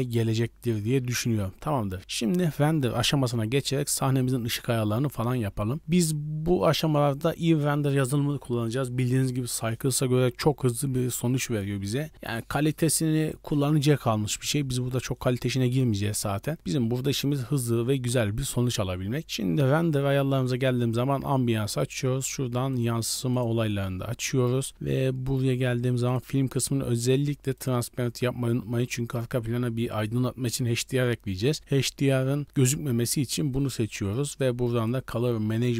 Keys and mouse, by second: 20.7 click, 22.2 click, 22.7 drag, 23.3 click, 26.0 click, 27.5 click, 34.7 click.